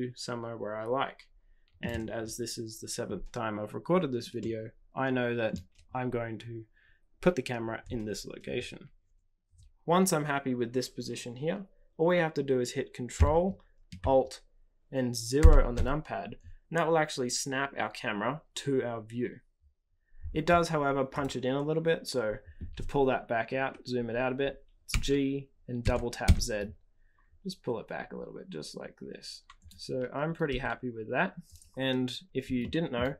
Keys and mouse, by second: 4.4-5.5 middle drag, 15.4 ctrl+alt+KP_0, 21.1 click, 24.8 g, 30.4 g, 32.6 shift+middle click.